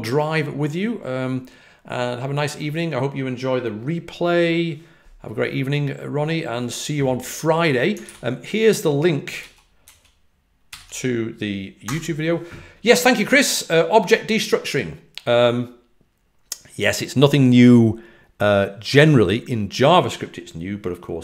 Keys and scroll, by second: 8.0 super+c, 8.0 super+v, 9.3 super+z, 9.8 super+a, 10.6 super+v.